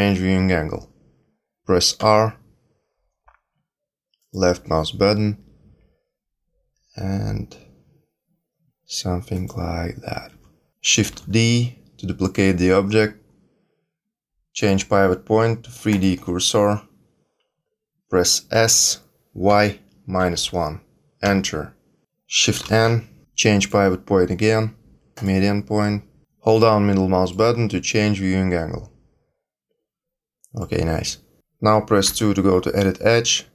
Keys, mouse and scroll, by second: 1.9 r, 4.9 g, 10.3 r, 11.0 shift+d, 14.5 click, 18.5 s, 22.6 shift+n, 23.5 click, 26.2 click, 26.5 middle click, 27.5 scroll down 4, 27.8 middle click, 31.4 click, 32.0 2.